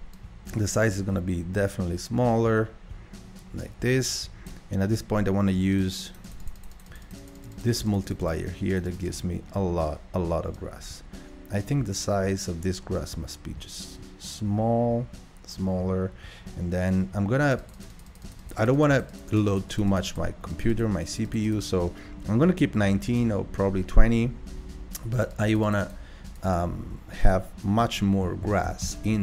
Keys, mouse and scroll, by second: 0.1-3.4 drag, 5.7-13.7 drag, 17.5-28.9 drag, 17.8-18.3 Left, 18.5 Left, 18.7 Left, 18.8 Left, 28.9 KP_0.